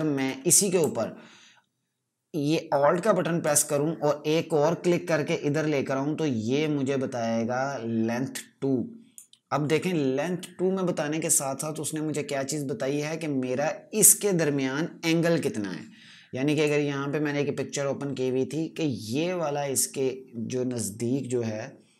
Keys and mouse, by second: 3.3 click, 16.4 click.